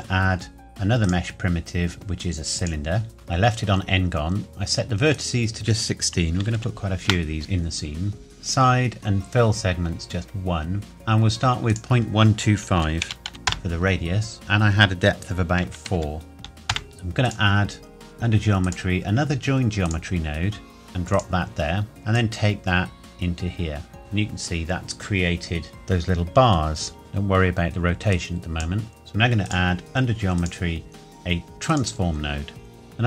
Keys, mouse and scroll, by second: 3.1-4.8 scroll up 1, 5.1 click, 6.3 KP_1, 6.5 KP_6, 7.0 KP_Enter, 11.7 click, 12.8 KP_Decimal, 13.0 KP_1, 13.3 KP_5, 13.5 KP_Enter, 14.3 click, 15.9 KP_4, 16.7 KP_Enter, 16.9 scroll down 1, 17.2 click, 22.1 click, 25.7 middle click, 27.0 click, 29.5 click.